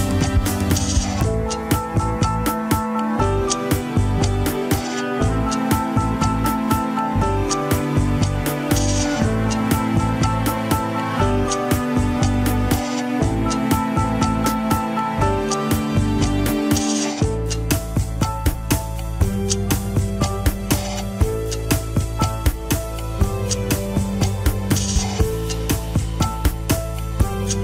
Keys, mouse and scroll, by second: 0.2 ctrl+click, 1.2-2.6 drag, 4.0 ctrl+click, 5.6 ctrl+click, 6.5 alt+z, 6.6-8.4 middle drag, 8.4 alt+z, 10.1 ctrl+click, 10.8 alt+z, 11.0 middle click, 11.5 alt+z, 12.3 ctrl+click, 12.4-14.2 middle drag, 14.2 ctrl+click, 15.1 ctrl+click, 15.9 middle click, 16.2 scroll down 1, 16.3 KP_1, 16.6 alt+z, 17.1 ctrl+Tab, 17.9 click, 18.3-19.0 scroll down 4, 19.0 scroll up 2, 19.9 ctrl+Tab, 20.4 a, 21.6 alt+r, 22.0 alt+g, 22.7 click, 23.8 r.